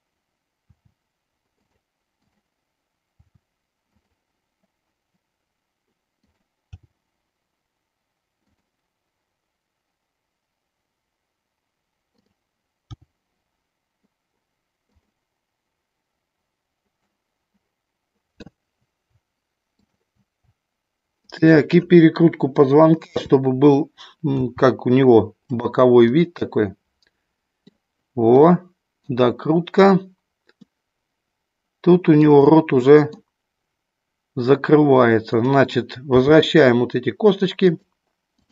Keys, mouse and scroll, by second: 0.7 r, 2.1 click, 3.9 click, 6.7 g, 12.2 click, 12.8 g, 15.0 click, 17.1-18.4 middle drag, 19.7 shift+click, 22.9 KP_7, 24.4 r, 25.6 click, 26.1-27.8 middle drag, 28.6 middle click, 30.6-32.2 middle drag, 32.8 middle click, 35.2 click, 36.2 g, 37.7 click.